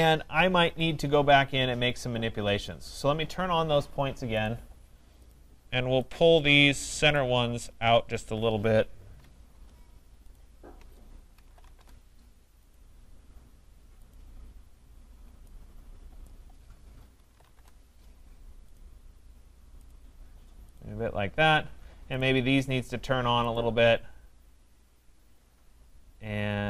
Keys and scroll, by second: 11.7 Return, 17.5 Return.